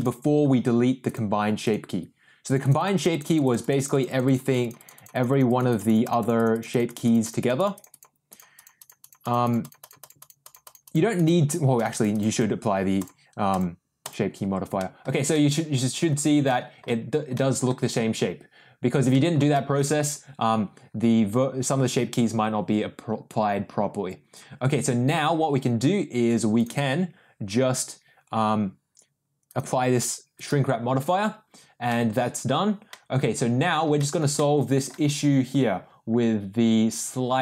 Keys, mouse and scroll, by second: 1.0 click, 1.6 click, 2.4 click, 7.4 click, 8.5 click, 11.8 click, 13.2 click, 13.7 click, 14.0 click, 14.7 middle drag, 15.3-16.0 middle drag, 16.4 middle drag, 17.3 middle drag, 19.1 middle drag, 19.5 shift+middle drag, 26.5 click, 29.5-30.7 drag, 31.8 middle click, 32.8 middle click, 33.9 shift+middle click, 34.3-34.8 middle drag.